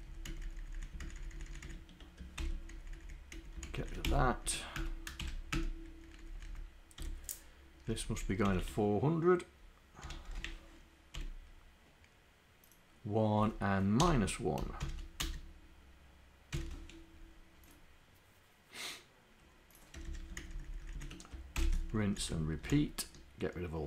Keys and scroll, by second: 0.1 Up, 0.3 Down, 0.8 Down, 2.4 ctrl+Insert, 3.1 Down, 3.4 Up, 3.8 shift+Down, 4.8 Return, 5.3 shift+Insert, 6.5 Up, 7.9 Left, 8.2 Left, 8.5 Delete, 10.3 0, 13.4 Down, 14.0 BackSpace, 14.9 shift+4, 15.7 /, 16.6 d, 20.7 shift+Down, 21.6 ctrl+Insert, 22.1 Down, 22.8 shift+Down.